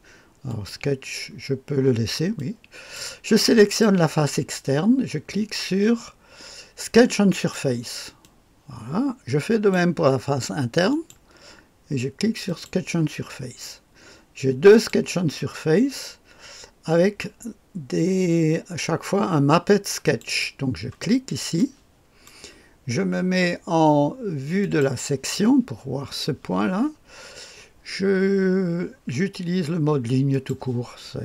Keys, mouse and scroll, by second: 0.5 click, 2.4 click, 3.6 click, 7.3 click, 8.2-9.7 drag, 10.9 click, 12.4 click, 14.7 click, 20.0-21.6 drag, 21.6 middle click, 21.8 click, 22.6-24.6 middle drag, 24.6-30.5 drag.